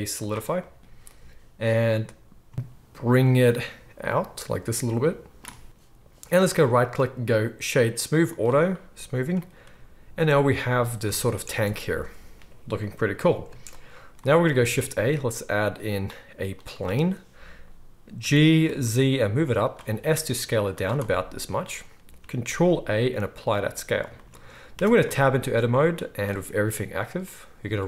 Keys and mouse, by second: 11.1 alt+a, 11.5 space, 13.4 space, 14.6 shift+a, 18.2 g, 19.6-21.1 drag, 19.9 s, 21.1-25.4 right drag, 22.4 ctrl+a, 24.7 Tab, 25.4-27.8 drag, 26.2-27.8 middle drag, 26.2-27.8 right drag.